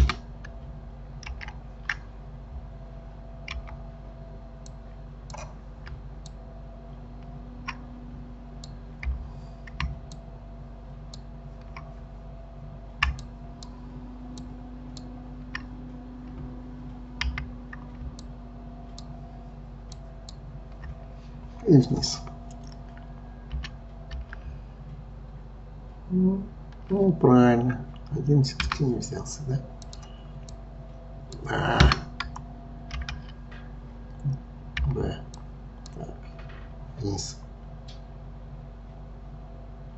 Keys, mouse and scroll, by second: 0.0 Escape, 1.3 ctrl+z, 3.6 b, 6.2-8.6 shift+drag, 9.0 b, 13.2 shift+click, 14.4 shift+click, 17.2 b, 20.0 shift+click, 23.6 g, 29.9 click, 30.5 click, 31.8 Escape, 33.0 ctrl+z, 34.8 b.